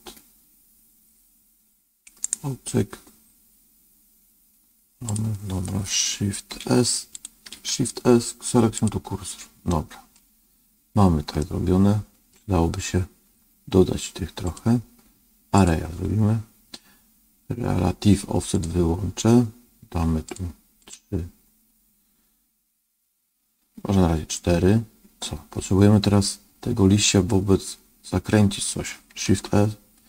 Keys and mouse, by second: 2.3-7.3 right drag, 7.4 shift+s, 9.6 middle click, 11.3 middle click, 14.5-15.6 drag, 18.4 click, 20.2 click, 20.8 click, 29.2 shift+a.